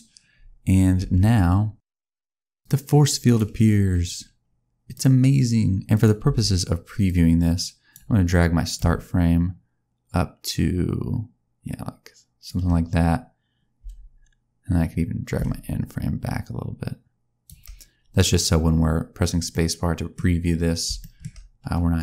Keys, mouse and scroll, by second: 0.9 space, 2.4 click, 3.1 click, 4.8 click, 5.8 click, 6.2 space, 6.9 click, 8.6 click, 13.7 space, 15.2 click, 19.4 middle click, 20.0-20.7 scroll down 3, 20.9 shift+middle click.